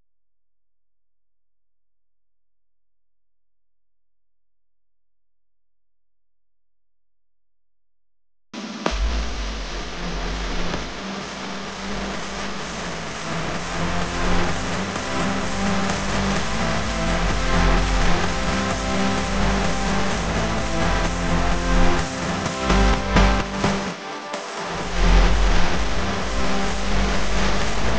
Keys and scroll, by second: 4.5-7.7 typing, 9.4 p, 13.9 v.